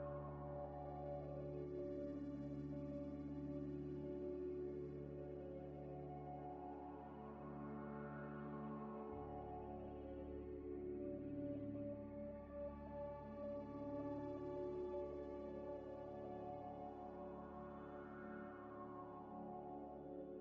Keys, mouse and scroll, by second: 0.3 1, 2.4 e, 2.5 z, 4.1 Tab, 4.5 Tab, 4.7 a, 5.0 f, 6.1-6.9 scroll down 1, 6.9 e, 7.7 Tab, 8.0 z, 8.5 g, 8.6 x, 14.5 scroll down 1, 15.0 scroll up 1, 15.3 shift+d, 15.6 g, 15.7 x, 16.4 middle click, 16.8 Tab, 17.6 alt+shift+click, 18.3 ctrl+b, 19.2 Tab, 19.6 g, 19.7 x.